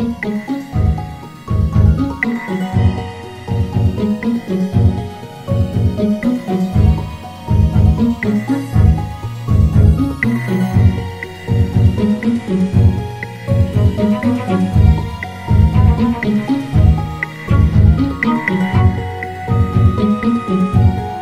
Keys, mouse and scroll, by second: 2.0 s, 4.3 g, 7.9 click, 12.4 click, 18.8 click.